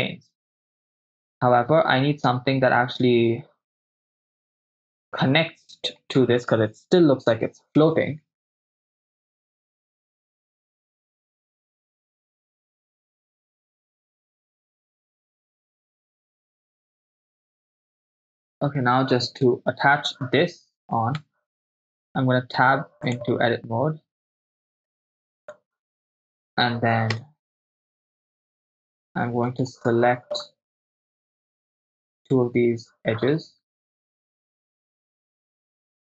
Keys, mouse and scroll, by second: 9.6 right click, 9.8 right click, 10.1 click, 10.2-11.4 typing, 10.4 Return, 11.1 Return, 11.8 click, 12.3 click, 12.8 shift+space, 13.4 shift+space, 14.0 click, 14.1 shift+space, 15.0 shift+space, 15.2-16.4 drag, 19.5 click, 19.5 right click, 21.3 Tab, 23.1 click, 24.5 click, 24.5 right click, 25.1 Tab, 25.6 click, 25.6 right click, 26.1 Tab, 27.3 KP_0, 28.1 middle click, 29.0 shift+middle click, 29.8 middle click, 31.5 right click, 33.8 right click, 34.6 middle click, 35.1 KP_7, 35.5 shift+middle click.